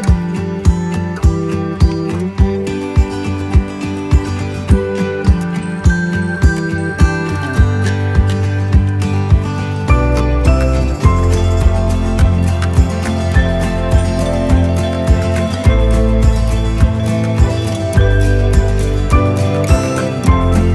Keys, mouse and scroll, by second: 15.9 click.